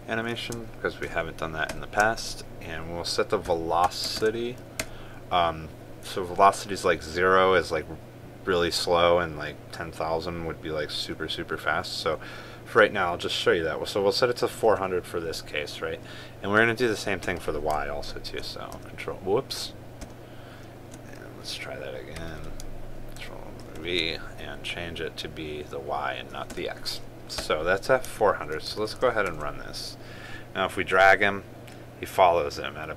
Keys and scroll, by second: 0.1 ctrl+space, 4.9 ctrl+space, 19.1 ctrl+x, 20.7 ctrl+z, 23.9 ctrl+c, 24.3 ctrl+v, 29.4 ctrl+s, 29.9 ctrl+r.